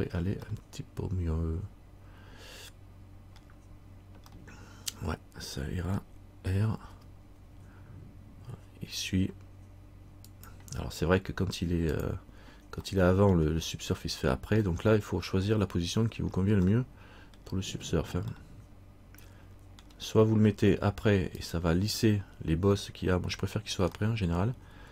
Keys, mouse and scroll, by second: 0.6 middle click, 4.5 middle click, 7.1 r, 12.1 click, 13.0 middle click, 14.9 middle click, 15.8 scroll down 1, 16.3-16.8 scroll down 1, 16.9 middle click, 18.5 middle click, 21.5 click, 24.2 middle click.